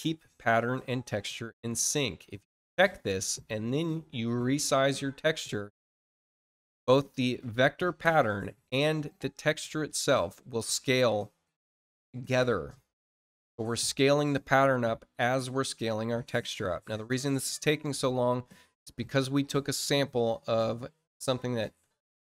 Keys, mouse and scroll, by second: 2.2 click, 3.7 click, 4.8 click.